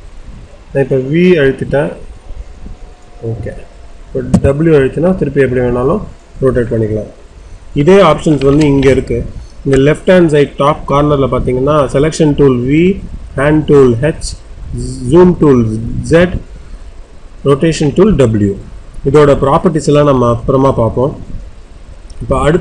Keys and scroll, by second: 4.2 w, 4.9 w.